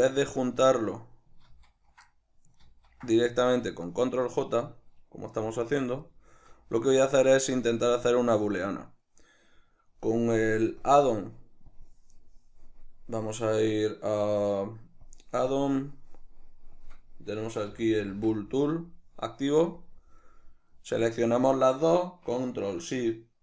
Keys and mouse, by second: 1.6 ctrl+z, 1.6-4.5 middle drag, 2.7 ctrl+z, 4.5 right click, 5.4 g, 6.2 right click, 6.3 z, 7.3 shift+right click, 7.9-10.8 middle drag, 10.8-20.5 drag, 20.5-23.4 middle drag.